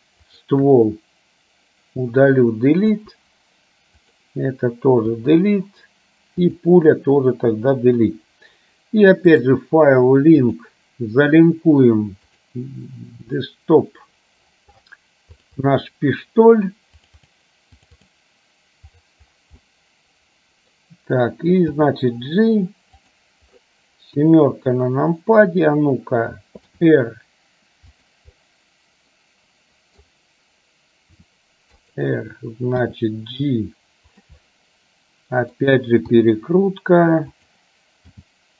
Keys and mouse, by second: 0.3 shift+click, 3.0 Delete, 4.1 click, 6.6 click, 9.5-10.8 drag, 19.7-20.8 middle drag, 21.8 g, 24.3 KP_7, 26.8 r, 28.6-30.2 middle drag, 31.2 r, 33.0 g, 34.5-35.7 middle drag, 36.2 r, 38.2 g.